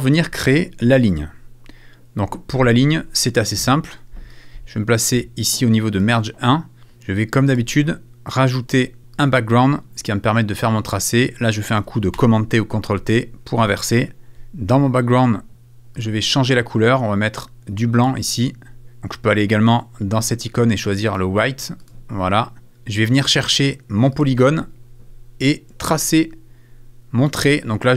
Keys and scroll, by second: 12.1 super+t.